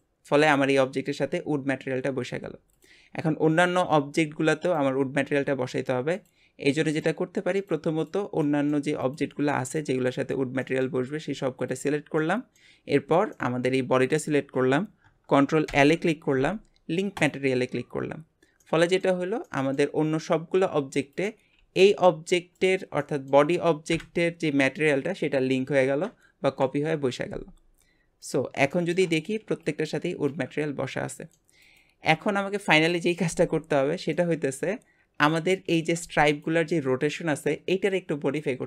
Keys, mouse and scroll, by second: 2.7 click, 3.6-4.6 middle drag, 4.6 shift+click, 6.1 shift+click, 6.9 shift+click, 7.6 shift+click, 8.0 shift+click, 8.4-9.0 shift+middle drag, 9.0 shift+click, 9.7 shift+click, 10.1-11.7 shift+middle drag, 11.7 shift+click, 12.2-14.1 shift+middle drag, 14.1 shift+click, 15.7 ctrl+l, 18.6-21.2 middle drag, 21.2 click, 21.6 g, 23.0-23.9 middle drag, 23.9 KP_Divide, 26.5 KP_Divide, 28.2 click, 28.7-31.6 shift+middle drag, 31.6 click, 33.7 scroll up 2, 34.1-38.6 middle drag.